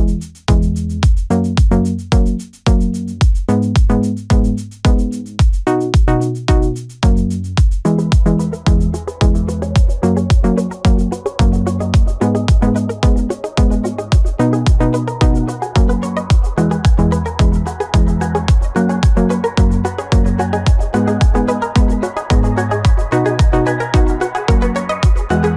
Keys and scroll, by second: 12.0 ctrl+-, 15.2 ctrl+-, 16.0 ctrl+-, 18.0 ctrl+-, 19.3 space, 20.1 ctrl+-, 20.6 space, 21.4 ctrl+-, 24.2 space.